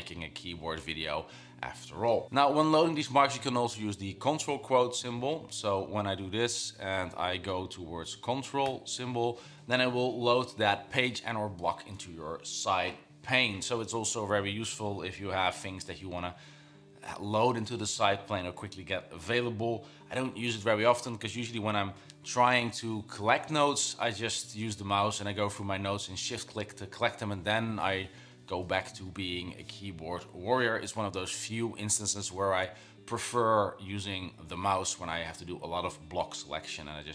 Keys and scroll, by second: 8.8 ctrl+'.